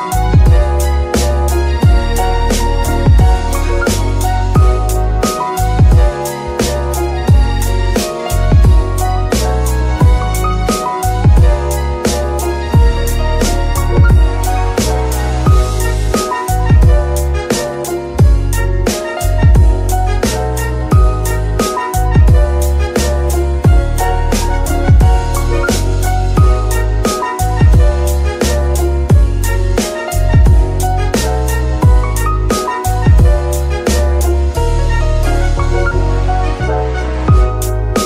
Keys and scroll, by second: 14.6 KP_1, 23.7 s, 24.9 KP_3, 27.7 KP_Decimal, 29.9 Tab, 35.2 alt+shift+s, 36.5 Tab.